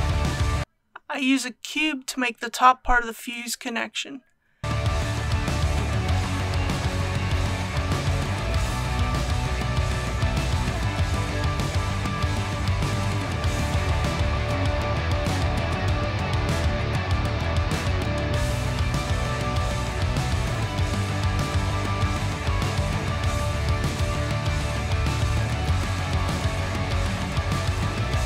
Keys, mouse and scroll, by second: 1.5 shift+a, 3.4 click, 4.6 s, 6.6 click, 7.0 g, 7.5 z, 8.9 click, 9.7 a, 11.6 s, 14.3 click, 14.7-15.3 typing, 17.2 click, 17.9-19.6 middle drag, 19.6-20.9 typing, 22.9 click, 23.5 KP_1, 25.0-26.2 typing.